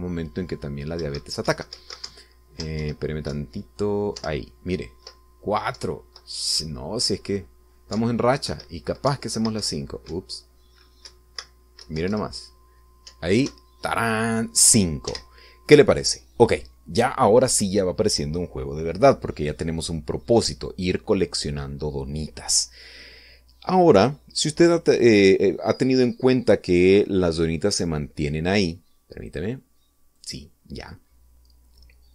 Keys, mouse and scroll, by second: 2.2 Right, 3.3 Down, 4.0 Right, 4.5 Left, 5.4 Up, 6.9 Left, 7.8 Right, 9.1 Up, 9.7 Left, 10.3 Right, 13.1 Left, 14.3 Up, 16.3 Escape, 30.5 click, 31.4 click.